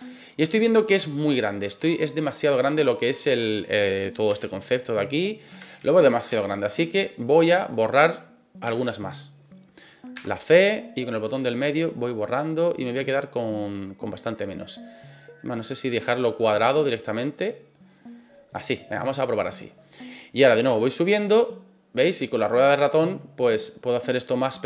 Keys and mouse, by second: 4.3 s, 5.4 click, 5.8 ctrl+z, 6.3 ctrl+z, 7.1 middle click, 8.6 KP_7, 10.1 c, 11.4-14.5 middle drag, 15.5 click, 16.4 middle click, 17.2 middle click, 18.0 right click, 18.4-19.9 middle drag, 20.7-23.6 drag, 23.9-24.6 middle drag.